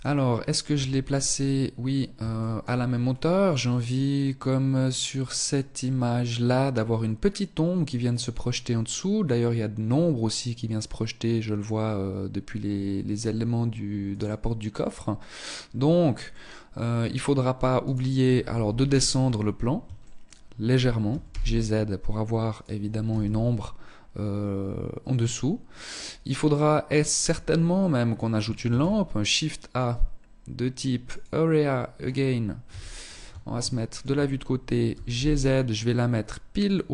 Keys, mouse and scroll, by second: 0.8-1.3 scroll up 3, 1.5 shift+middle click, 2.0-2.4 scroll up 2, 15.0-15.3 scroll down 1, 15.4 middle click, 17.0 right click, 17.8 KP_1, 18.4 scroll down 5, 19.2 shift+middle click, 20.2 g, 22.2 KP_0, 25.2 scroll down 2, 25.6 middle click, 27.8 shift+a, 31.8 KP_3, 32.7 shift+middle click, 34.0 g, 35.8 click, 36.0 middle click.